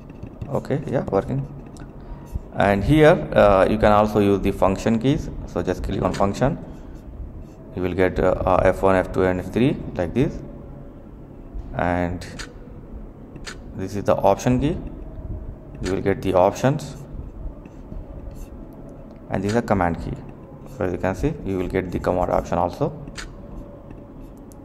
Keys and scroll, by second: 0.0-1.4 typing, 6.0 a, 6.5 Caps_Lock, 6.6 q, 7.5 F1, 8.0 F2, 8.4 F4, 8.5 Caps_Lock, 15.4-16.3 typing, 17.5 x, 19.7 x, 20.3 1, 20.7 3, 21.3 5.